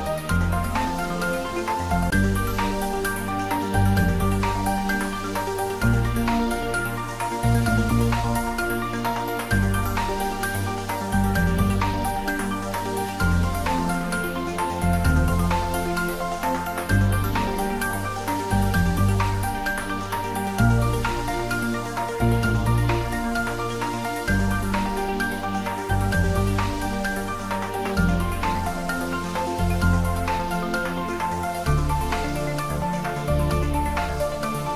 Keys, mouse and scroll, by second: 3.5 click, 4.1 scroll down 1, 5.4 shift+d, 5.9 x, 16.8 click, 17.7-19.3 middle drag, 19.3 scroll up 1, 20.6 shift+z, 21.1-22.5 middle drag, 22.5-25.0 scroll up 1, 25.6-28.9 middle drag, 28.3-28.9 scroll down 1, 28.9 scroll down 1, 30.6-32.2 scroll up 1, 33.7 click.